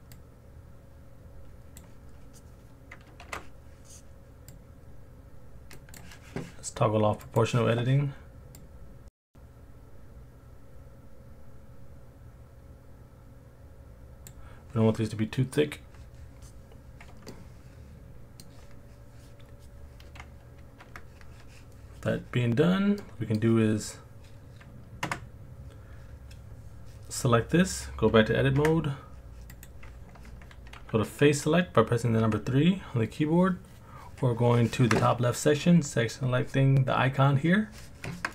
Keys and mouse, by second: 0.5-1.8 drag, 3.3 ctrl+z, 4.7 click, 5.7 click, 7.3 click, 8.6 click, 17.3-18.4 middle drag, 20.8 Tab, 23.0-23.4 middle drag, 28.6 Tab, 29.6 click, 32.2 3.